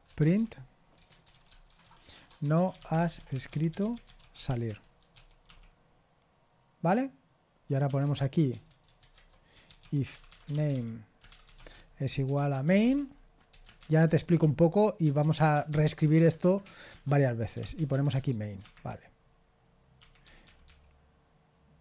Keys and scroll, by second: 0.1-5.6 typing, 8.0-12.5 typing, 9.1 Return, 13.5-18.8 typing, 20.0 Escape, 20.2-20.6 typing.